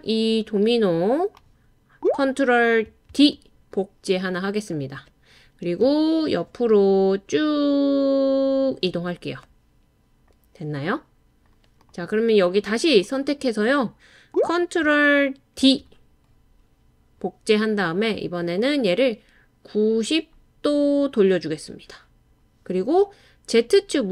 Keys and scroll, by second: 3.1 super+d, 5.8 Tab, 6.3-8.1 typing, 12.3 typing, 15.6 super+d.